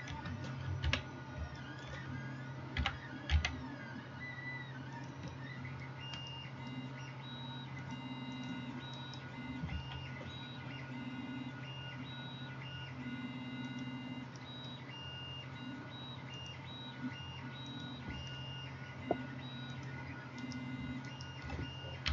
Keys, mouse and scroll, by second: 0.8 KP_1, 2.8 g, 8.0-22.1 drag, 9.0 middle click, 9.0 right click, 9.8 ctrl+a, 14.5-17.1 middle drag, 20.4 middle click, 20.4 right click, 21.1 shift+middle click, 21.1 shift+right click.